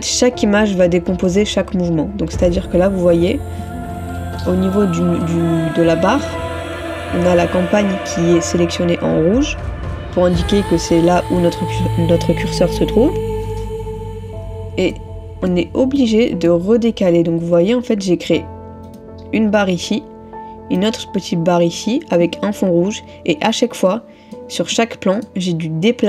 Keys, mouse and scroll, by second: 4.0 ctrl++, 5.3 middle click, 15.0 middle click, 23.9 middle click.